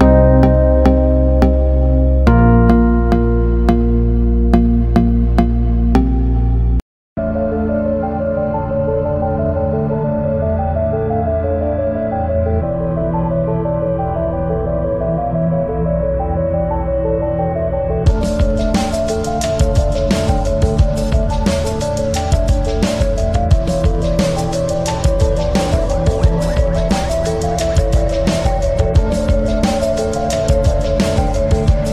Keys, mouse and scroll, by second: 2.9 click, 4.5 BackSpace, 9.1-12.4 typing, 26.1 click.